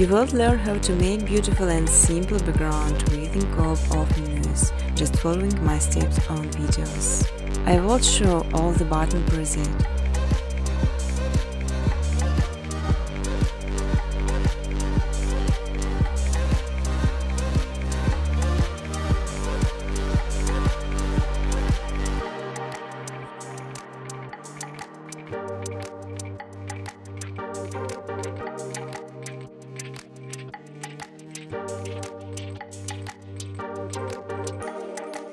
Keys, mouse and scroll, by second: 0.8 click, 1.6 click, 2.3 click, 2.7 click, 3.2 click, 4.2 click, 4.8 v, 5.2 click, 5.7 click, 6.7 click, 10.8 click, 12.2 click, 13.9 click, 15.8 click, 16.5 click, 17.3 click, 19.5 click, 20.2 click, 22.4 click, 26.0 click, 29.5 click, 30.1 click, 32.1 click, 33.7 click, 34.1-35.1 scroll.